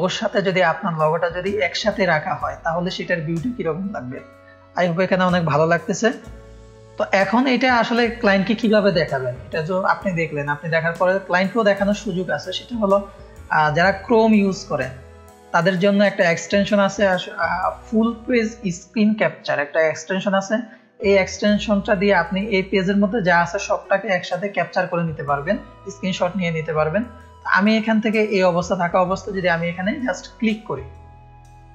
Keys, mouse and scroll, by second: 7.0 F1, 7.2-8.2 scroll up 2, 8.4-11.4 scroll up 5, 10.3 middle click, 11.8 scroll down 1, 12.6 scroll down 2, 15.8-16.2 scroll up 2, 21.3 middle click, 21.3-22.3 scroll up 4, 21.7 middle click, 22.5-23.4 scroll down 2, 23.4-24.4 scroll up 2, 30.3 click.